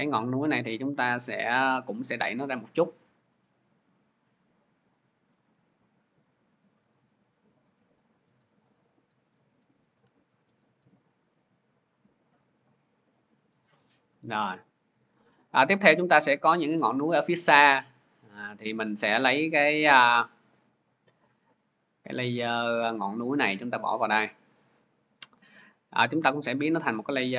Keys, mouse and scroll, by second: 8.5 click, 13.0 shift+click, 17.8 click, 19.6 click, 24.6 click, 26.7 click.